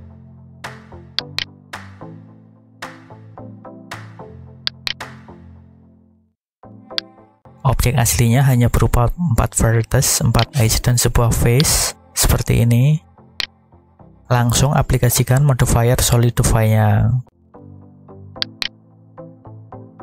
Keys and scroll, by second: 3.2 shift+a.